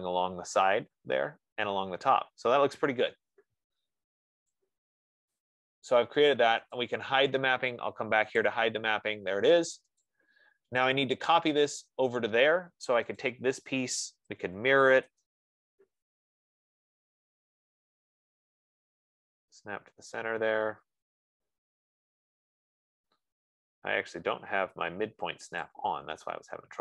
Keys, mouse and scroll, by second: 1.8-2.6 scroll, 5.2 click, 5.8 click, 7.2 click, 9.0 click, 9.8 scroll, 10.4 click, 10.9 middle click, 11.0 middle click, 13.7 click, 14.5-17.1 typing, 22.0-22.6 scroll, 25.6-26.1 scroll, 26.1 click.